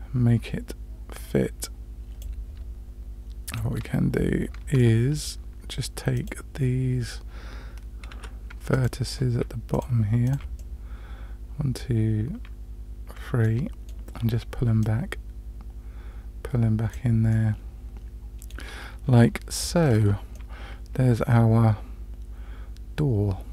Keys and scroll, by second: 3.8 Tab, 8.1 1, 19.0 Tab.